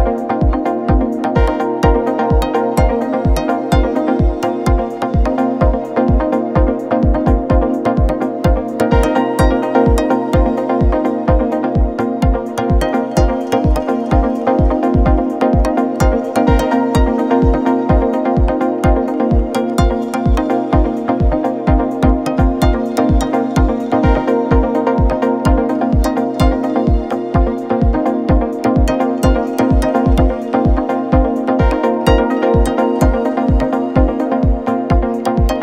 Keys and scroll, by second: 0.3 v, 1.4 t, 15.4 u, 19.2 2, 19.4 0, 19.8 Return, 23.2 4, 23.4 9, 24.1 BackSpace, 24.4 0, 24.9 Return, 33.9 Return.